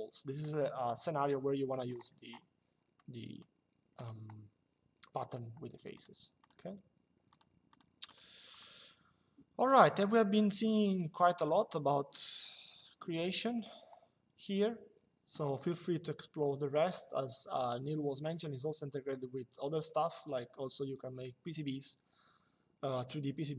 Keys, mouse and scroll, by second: 2.7 click, 5.7 click, 11.1 click, 12.4 click.